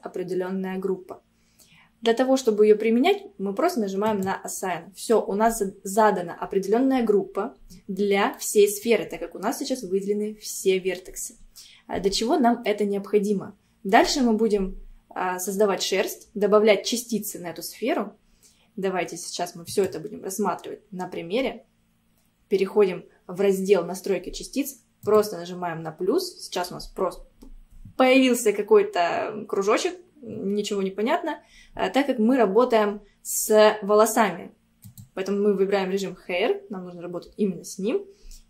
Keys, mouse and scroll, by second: 4.1-7.2 drag, 7.7-8.4 scroll down 1, 8.4-11.4 middle drag, 12.1 Tab, 12.7-15.8 middle drag, 19.7 click, 25.1-28.3 drag, 34.9 click.